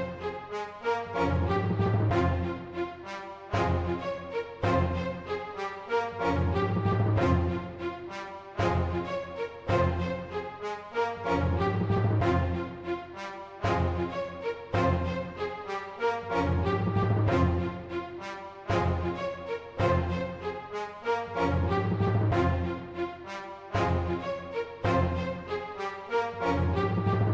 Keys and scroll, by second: 0.0-0.4 typing, 0.2 Right, 1.8-3.8 typing, 2.7 Right, 6.2 super+8, 6.8 typing, 8.6 super+8, 8.7-10.0 typing, 11.4 super+8, 11.8-17.5 typing, 14.9 super+8, 18.5 super+8, 19.2-22.5 typing, 26.0 super+8, 26.2-27.3 typing.